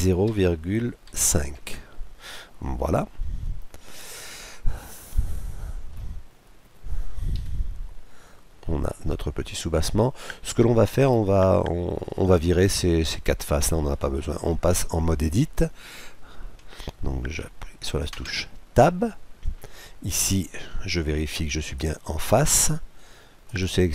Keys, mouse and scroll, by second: 2.9-4.6 middle drag, 4.9-6.8 middle drag, 6.8-7.4 scroll up 1, 7.4-8.1 scroll up 1, 7.4 KP_Decimal, 8.1 scroll up 1, 8.9-10.8 middle drag, 18.2 Tab, 21.7-23.4 drag, 23.5-23.9 right drag.